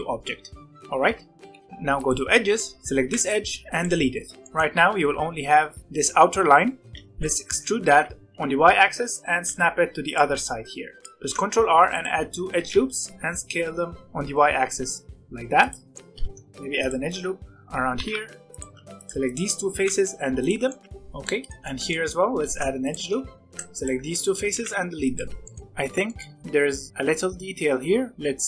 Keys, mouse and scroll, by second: 1.0 Tab, 1.5 1, 1.7 2, 1.9 click, 3.0 x, 4.4 middle click, 4.5 a, 5.0 g, 5.8-7.0 middle drag, 7.0 ctrl+z, 7.8 g, 8.3 e, 11.0 alt+a, 11.2 ctrl+r, 12.4 s, 15.9 middle click, 16.1 ctrl+r, 17.9 g, 18.7 3, 18.9 click, 19.2 shift+click, 19.7 x, 21.2-22.3 middle drag, 22.3 ctrl+r, 23.5 3, 23.7 click, 24.1 shift+click, 24.5 x, 25.3-28.4 shift+middle drag.